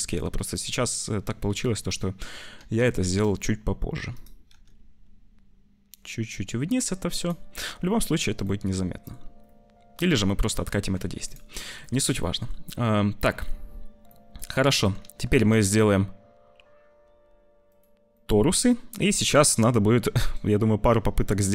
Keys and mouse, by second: 1.4 `, 2.5 g, 4.4 g, 7.7 click, 8.4 click, 9.9 click, 11.0 ctrl+s, 11.2 click, 11.5 click, 12.0 click, 14.1 click, 14.6 click, 15.4 shift+a, 18.2 click, 20.3-21.5 shift+drag.